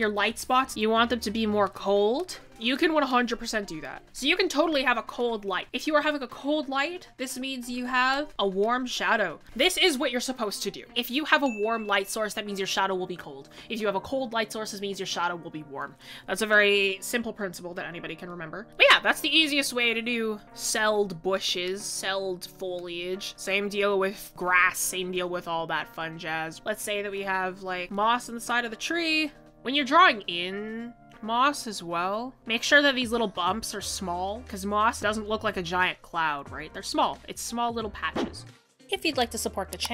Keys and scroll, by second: 1.0 ctrl+z, 3.6 ctrl+s, 9.4 typing, 27.3 ctrl+z.